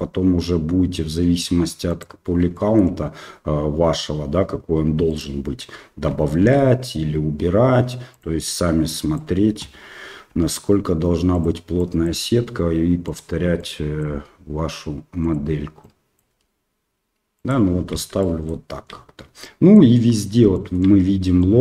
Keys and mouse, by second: 2.6 shift+middle click, 5.1 alt+right click, 6.4 ctrl+b, 8.9 click, 10.3 g, 11.9 click, 12.2 g, 13.7 click, 14.1 g, 15.9 click, 16.3 g, 18.3 shift+middle click, 19.5 click, 20.5 shift+click, 21.5 click.